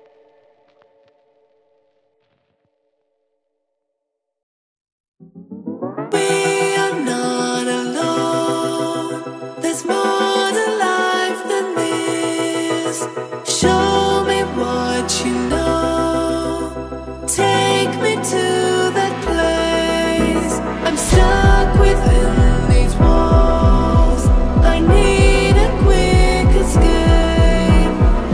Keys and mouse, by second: 6.7-7.7 middle drag, 7.9-9.1 middle drag, 9.6 ctrl+middle click, 10.1 middle click, 10.6 click, 10.7 click, 11.3 ctrl+d, 13.3 g, 14.1 shift+d, 16.1 click, 16.2 click, 17.3 shift+a, 20.9 click, 23.1 ctrl+middle click, 23.5 middle click, 23.8 ctrl+middle click, 24.3-28.0 drag.